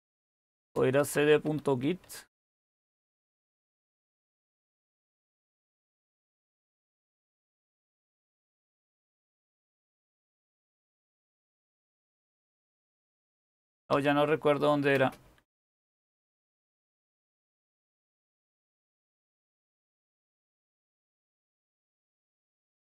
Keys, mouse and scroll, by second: 0.0-3.6 typing, 6.9-8.0 typing, 10.9-11.8 typing, 13.5-16.5 typing, 19.8-21.1 typing.